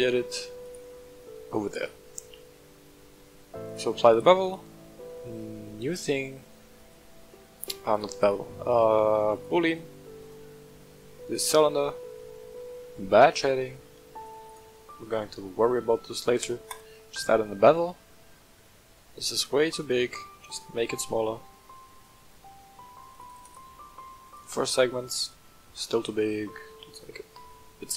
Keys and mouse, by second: 0.6 click, 1.6 click, 3.6-4.1 drag, 4.4-6.9 drag, 8.3-9.4 drag, 10.3 click, 14.2 click, 14.6-16.8 drag, 17.6 shift+middle drag, 18.6-19.0 shift+middle drag, 20.5-22.1 shift+drag, 23.2 click, 26.0-27.9 shift+drag.